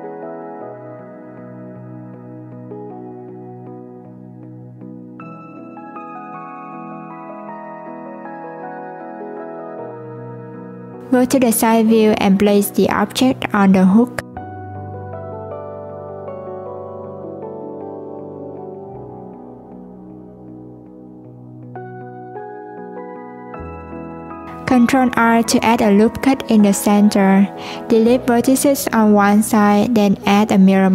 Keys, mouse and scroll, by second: 2.2 click, 4.1 s, 10.8 click, 12.1 click, 14.8 s, 18.5 click, 20.6 click, 21.8 Tab, 23.2 ctrl+r, 26.2 click, 27.3-27.8 scroll down 2, 27.8 scroll up 1, 27.9 click, 28.8-29.4 scroll down 4, 30.3-30.9 drag.